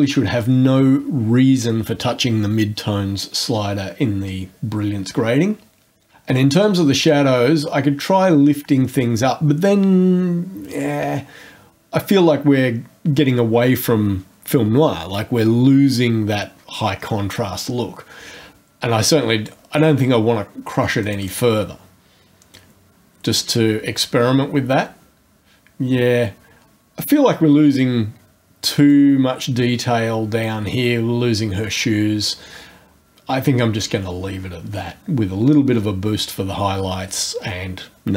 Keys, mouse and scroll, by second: 7.1-19.6 drag, 21.0 click, 22.5-29.1 drag.